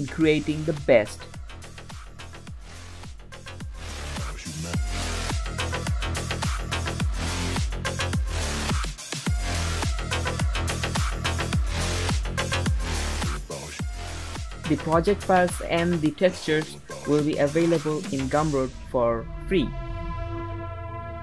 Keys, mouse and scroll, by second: 0.2 click, 1.4 click, 2.2 scroll up 1, 2.3 middle click, 2.9 scroll down 1, 3.0 click, 3.1 s, 3.7 click, 3.9 s, 4.3 middle click, 4.5 click, 5.0 click, 5.4 click, 5.8 middle click, 6.2 g, 6.6 middle click, 6.7 click, 7.1 middle click, 7.2 g, 7.9 click, 8.2 click, 9.4 click, 9.6 click, 10.1 middle click, 10.2 scroll up 4, 10.3 shift+middle drag, 10.7 shift+middle click, 11.5 shift+middle click, 12.0-12.7 scroll down 5, 12.1 middle click, 12.7-15.8 typing, 12.8 scroll up 2, 13.5 scroll down 3, 13.6-14.0 middle drag, 16.1 middle click, 16.3-16.8 scroll up 4, 16.4 middle click, 16.8 scroll down 5, 17.0 shift+click, 17.1 g, 17.5 middle click, 17.6 r, 18.1 click, 18.6 click, 18.8 scroll up 3, 18.9 middle drag, 19.1 middle click, 19.4-19.8 scroll down 5, 20.0-21.2 drag.